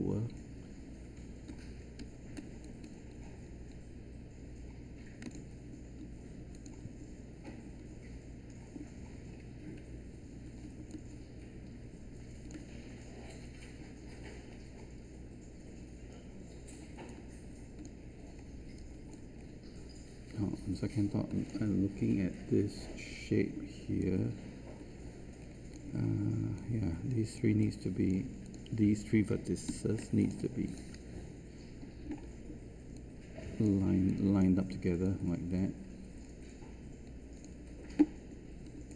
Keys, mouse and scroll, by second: 1.4-2.0 typing, 2.6 ctrl+shift+click, 29.6 q, 31.8 r.